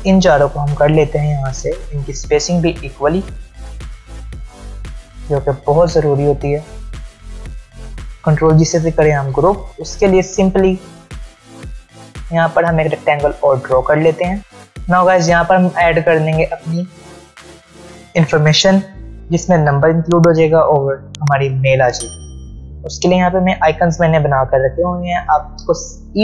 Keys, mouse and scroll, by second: 0.5 shift+click, 3.4-5.3 scroll down 1, 5.5 click, 14.4 space, 14.7 click, 16.3 space, 16.4-17.0 click, 16.8 space, 23.4 click, 24.9 space, 25.0-26.2 click, 25.4 space.